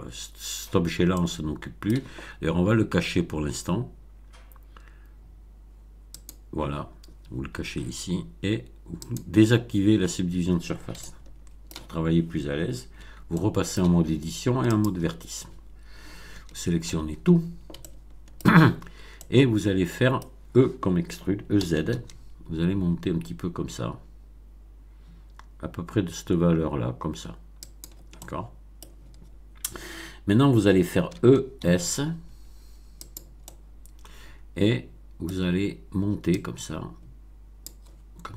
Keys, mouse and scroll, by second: 1.1-2.0 middle drag, 6.1 click, 9.0 click, 10.9-11.8 shift+middle drag, 12.9 Tab, 13.2 middle click, 14.6 click, 15.5 scroll up 1, 16.3 a, 17.8 shift+middle click, 18.8-19.1 shift+scroll up 5, 19.1-20.3 middle drag, 21.5 e, 22.0 z, 27.6 click, 28.1 middle click, 31.0 e, 31.6 s, 32.9 click, 33.4-35.4 middle drag, 36.3-37.8 drag.